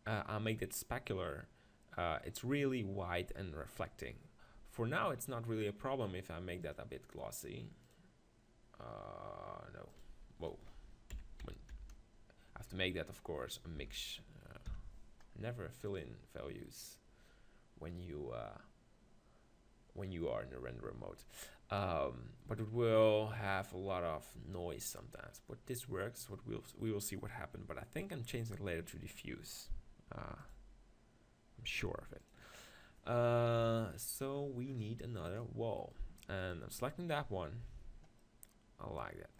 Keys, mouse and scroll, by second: 6.7-9.1 drag, 10.0-12.1 drag, 30.9-32.8 drag, 33.6 KP_7, 34.3 middle click, 36.4-38.3 right drag.